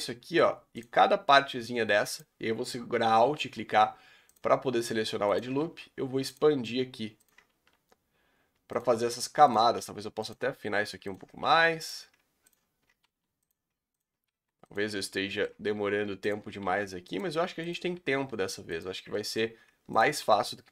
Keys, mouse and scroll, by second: 1.0 scroll up 1, 2.1 alt+click, 3.4 s, 5.3 alt+Left, 5.6 s, 7.3 alt+Left, 7.5 s, 9.8 s, 11.5 s, 13.0 s, 14.0 alt+click, 14.3 s, 15.0-16.3 shift+middle drag, 16.3 alt+click, 16.6 s, 17.7 alt+click, 18.0 s, 19.1 shift+middle click, 19.4 scroll up 2, 20.0 alt+click, 20.2 s.